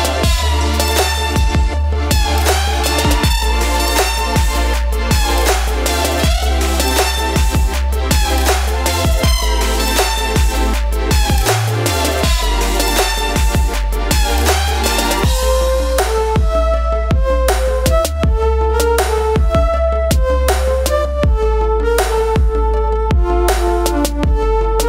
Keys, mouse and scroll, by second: 2.1 ctrl+click, 2.2 ctrl+space, 3.0 shift+click, 3.2 ctrl+space, 3.6 click, 5.8 click, 7.6 click, 7.6 space, 8.0 click, 13.8 space, 13.9 click, 14.0 space, 20.8 Up, 21.1 click, 21.4 Up, 21.6 click, 22.7 space, 22.7 click, 22.8 space, 23.5 click.